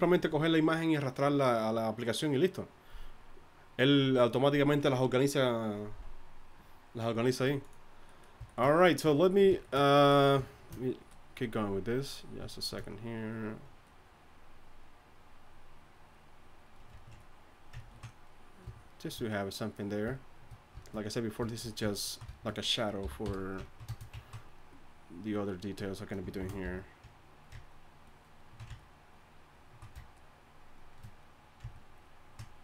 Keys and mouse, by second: 23.0 y, 23.2 f, 26.4 shift+c, 26.6 f.